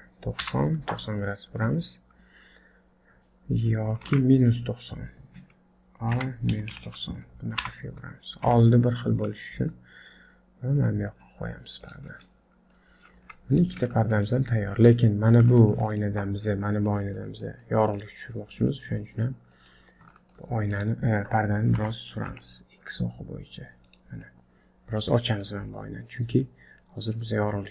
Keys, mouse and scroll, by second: 1.3-2.4 scroll down 3, 3.9 scroll down 1, 4.0 ctrl+z, 6.2 r, 8.5 g, 12.3 middle click, 12.9-13.6 scroll up 3, 13.2 z, 14.0 shift+middle click, 14.8 middle click, 15.2 scroll up 1, 15.5 shift+middle click, 15.9 click, 16.5 middle click, 17.2 scroll down 3, 17.4 middle click, 18.0 click, 18.3 middle click, 19.0-19.3 scroll up 2, 19.3 middle click, 19.8 scroll up 1, 20.1 shift+middle click, 20.7 click, 21.8 g, 24.2 middle click, 25.2 scroll down 3, 25.4 middle click, 27.4-27.7 scroll up 2.